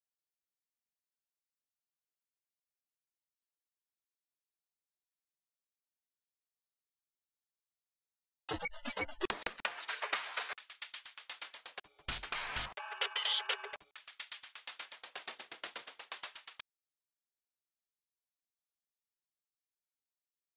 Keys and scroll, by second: 1.4 super+t, 2.6 Left, 4.3 Left, 4.5 Up, 4.7 Right, 5.1 Down, 7.5 Right.